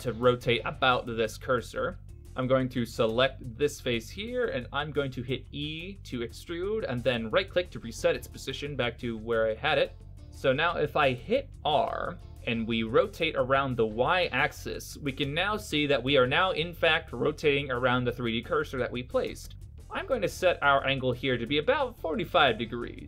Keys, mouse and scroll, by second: 0.1 right click, 1.6 KP_1, 4.6 e, 6.3 e, 10.2 r, 20.6 r, 22.6 click.